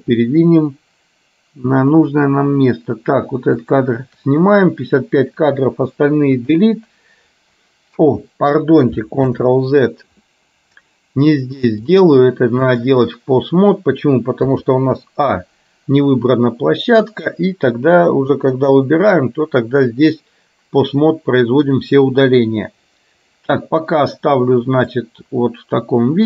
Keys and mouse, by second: 3.7 shift+click, 6.5 Delete, 9.4 ctrl+z, 12.0-13.2 drag, 18.7 Delete, 25.0-26.2 drag.